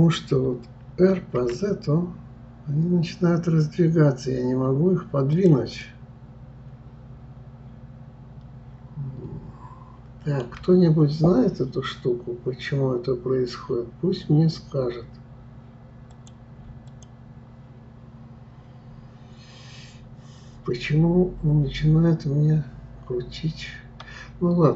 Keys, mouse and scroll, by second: 5.8-8.8 middle drag, 16.1 click, 16.9 click.